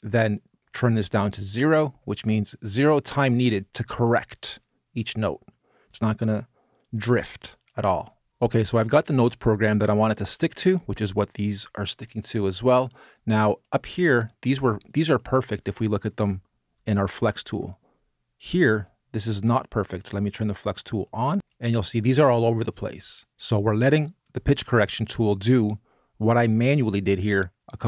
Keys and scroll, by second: 16.0 super+space.